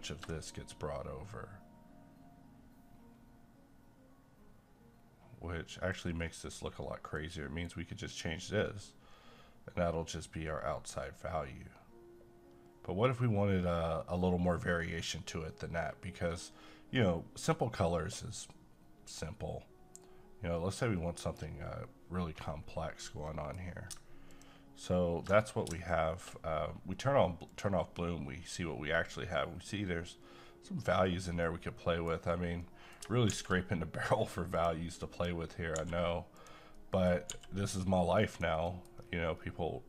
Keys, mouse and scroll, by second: 0.0-17.1 ctrl+drag, 22.6-23.1 scroll down 1, 23.3 middle click, 24.3 ctrl+click, 31.4 middle click, 32.4 scroll down 1, 32.6 middle click, 33.3 a, 34.5 click, 35.8 g, 36.4 click, 36.7 middle click, 37.3 g, 38.3 click, 38.6 scroll down 1, 38.7 middle click, 38.9 scroll up 1.